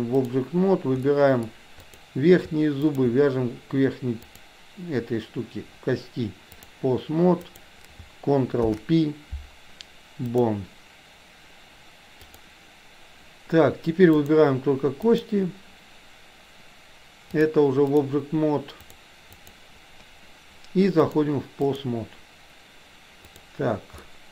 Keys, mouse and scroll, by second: 1.2 middle click, 1.8 click, 4.3-6.8 drag, 7.5 click, 8.7 ctrl+p, 12.4-13.5 drag, 14.2 click, 15.2 click, 17.3 click, 18.9 click, 19.4 click, 21.0-21.9 drag, 23.4 click, 24.2-24.3 middle drag.